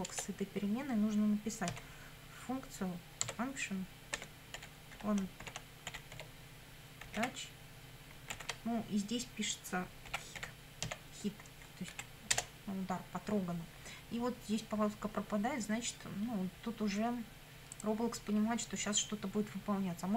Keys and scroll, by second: 0.1 Return, 1.7 f, 3.2 Tab, 4.2-8.3 typing, 9.9-11.3 typing, 11.9 Right, 12.3 Return.